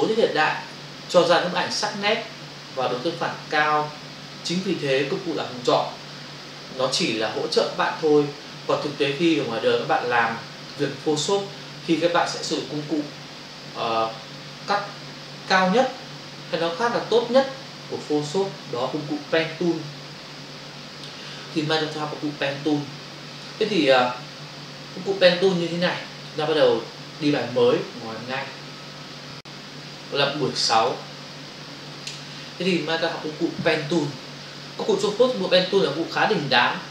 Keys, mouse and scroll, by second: 25.2 click, 28.4 shift+F5, 30.8 click, 32.1 click.